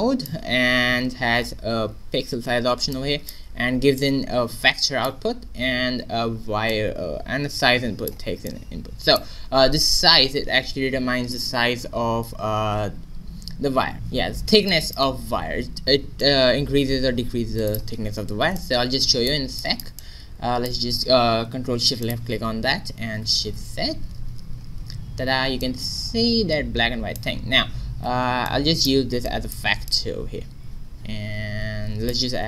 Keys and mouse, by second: 6.6-11.3 drag, 14.6-16.2 middle drag, 16.2-18.5 drag, 19.2 middle click, 19.5-21.9 drag, 22.2-23.3 drag, 23.3 shift+z, 25.6 middle click, 26.2 middle click, 28.1 shift+z, 29.9-31.7 drag, 32.2 shift+a.